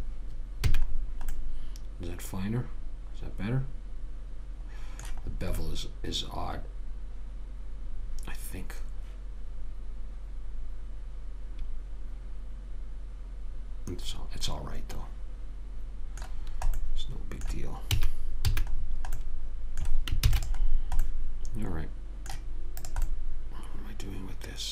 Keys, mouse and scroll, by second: 1.0 a, 1.3-3.7 middle drag, 5.6-7.6 middle drag, 16.7 middle click, 18.2 a, 18.9 a, 20.5 ctrl+s, 23.2 click.